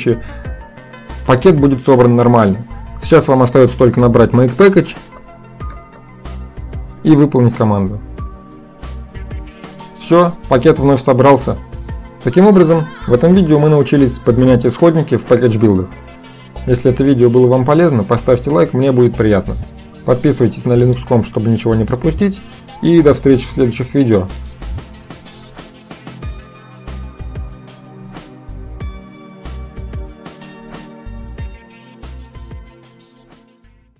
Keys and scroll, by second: 4.6-6.9 typing, 7.0 Return.